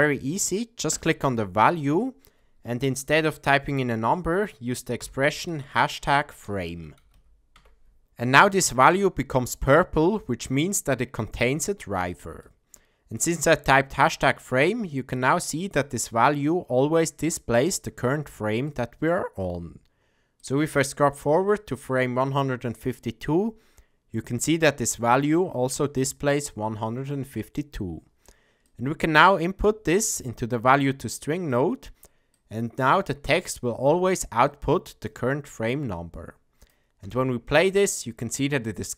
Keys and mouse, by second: 0.9-8.0 drag, 12.5 click, 15.1-15.8 drag, 18.6-19.1 drag, 20.4-21.5 drag, 28.6-29.4 drag, 30.2-31.5 drag, 32.3-32.9 drag, 34.5-35.1 drag, 35.7-36.7 drag, 37.0 space.